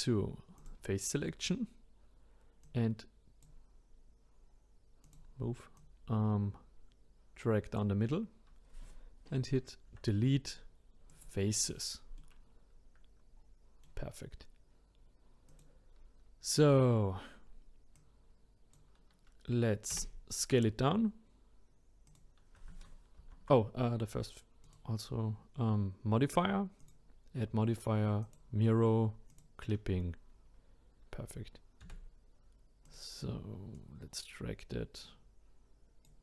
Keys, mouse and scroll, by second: 0.6-3.4 drag, 5.0-8.8 drag, 9.9 Delete, 12.2-15.5 middle drag, 15.5 click, 17.4-17.8 scroll down 1, 17.9 click, 19.9 s, 23.2 ctrl+z, 24.6 click, 26.8-29.4 drag, 31.8 s, 33.8 click.